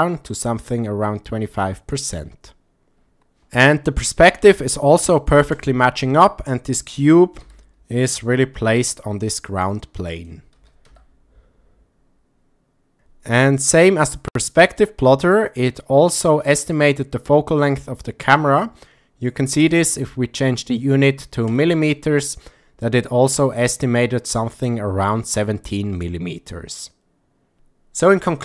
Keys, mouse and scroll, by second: 7.5 s, 10.2 click, 10.9 r, 10.9 z, 19.8-21.5 drag.